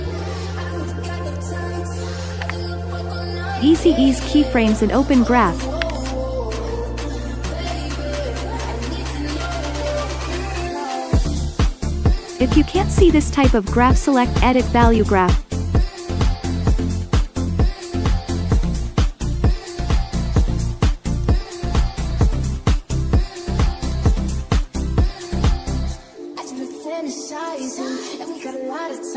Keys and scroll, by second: 2.4 u, 5.8 F9.